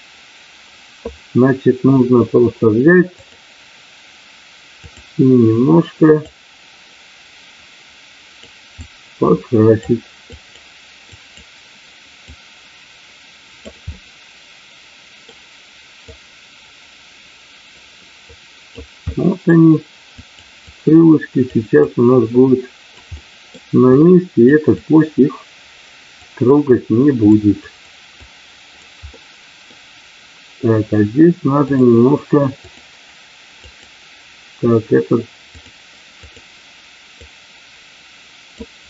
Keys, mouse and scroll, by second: 3.1-5.1 drag, 6.3-8.4 drag, 8.8 click, 10.3 click, 11.2 click, 12.3-13.7 drag, 13.9-15.3 middle drag, 16.0-18.8 drag, 19.0 middle click, 20.2 click, 20.5 click, 21.8-22.9 drag, 23.2 middle click, 23.9 click, 24.8-26.2 drag, 26.5 click, 27.7 click, 28.2 click, 29.2 middle click, 31.7-32.8 drag, 33.7 click, 35.5 click, 37.2-38.5 drag.